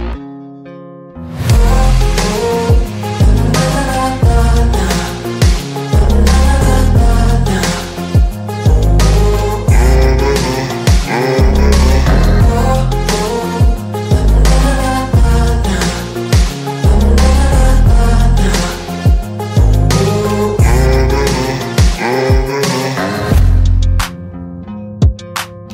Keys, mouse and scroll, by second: 4.5 click, 4.5 click, 8.0-10.7 drag, 11.6 ctrl+g, 12.1 click.